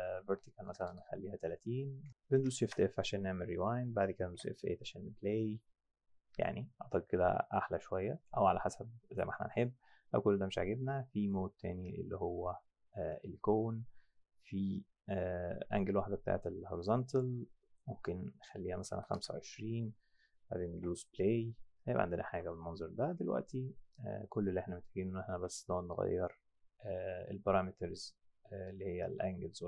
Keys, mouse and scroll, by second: 0.2 Tab, 0.6 KP_Enter, 0.6 KP_0, 0.9 KP_Enter, 2.6 shift+g, 4.3 F7, 7.6 click, 8.2 click, 11.2 click, 17.1 click, 18.7 KP_1, 18.9 KP_6, 19.2 KP_Enter, 20.8 F9, 22.3 F9.